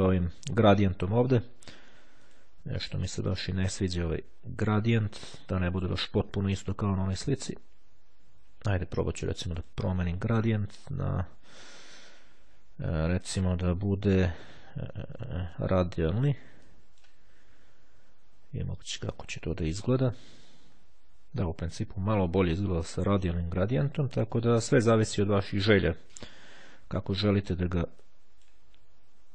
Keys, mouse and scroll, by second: 2.3 click, 3.1-4.5 drag, 5.1-6.4 drag, 9.7 click, 10.5 click, 13.1 click, 14.9-16.2 drag, 16.7-17.7 drag, 19.1-20.5 drag, 28.1-29.1 drag.